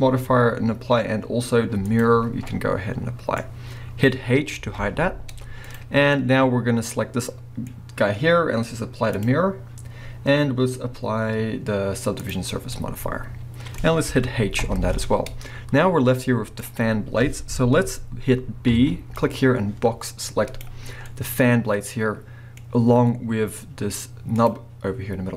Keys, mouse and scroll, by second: 2.5-5.7 middle drag, 3.5 scroll up 2, 4.6 h, 5.7 click, 5.9 scroll down 1, 6.1-9.2 middle drag, 7.9-9.2 scroll up 2, 9.2-12.7 drag, 12.7-20.2 middle drag, 13.8-14.6 scroll up 2, 14.6 h, 18.7 b, 21.1-22.7 middle drag, 22.7 scroll up 2, 22.8-24.3 middle drag, 24.3 click.